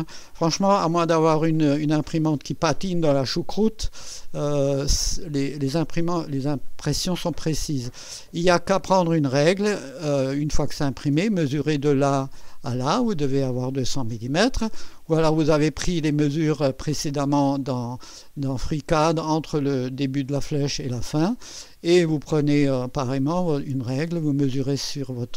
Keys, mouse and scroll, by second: 7.3-7.7 scroll up 1, 9.6 ctrl+scroll up 2, 10.6 ctrl+middle click, 14.9 ctrl+scroll down 2, 18.0 middle click.